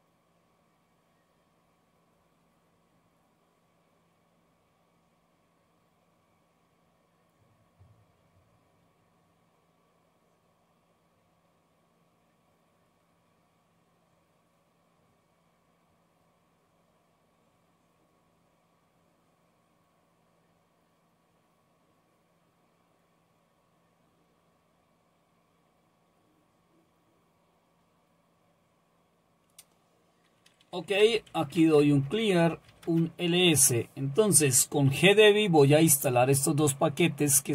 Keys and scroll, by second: 30.8-33.0 typing.